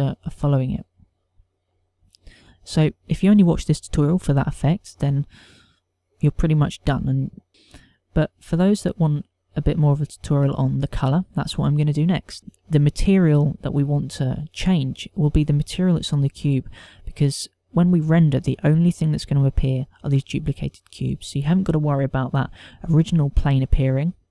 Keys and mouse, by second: 2.7 click, 8.9 shift+middle click, 12.4 click, 13.1 shift+middle click, 15.5 click, 23.8 KP_0.